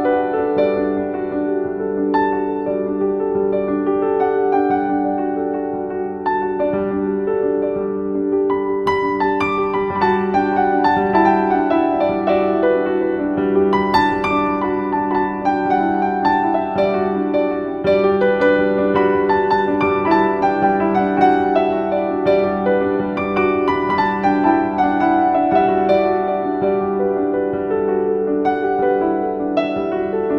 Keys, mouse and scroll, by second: 1.2 scroll up 1, 13.6 Return, 14.7 click, 16.7 right click, 16.7 typing, 17.5 click, 24.8 ctrl+v, 25.2 click, 29.8-30.3 drag.